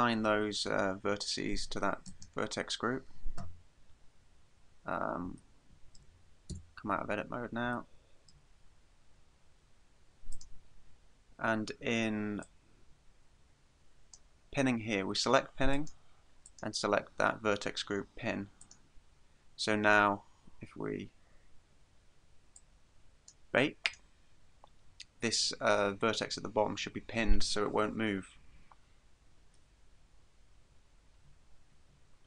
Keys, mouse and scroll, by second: 2.1 click, 4.9-5.5 scroll down 1, 5.5 scroll down 3, 5.6 shift+middle click, 6.6 Tab, 7.2-7.6 scroll down 4, 7.9 shift+middle click, 8.4-9.0 scroll down 2, 10.4 click, 12.5 click, 15.8 click, 16.5 click, 22.6 click, 23.9 click.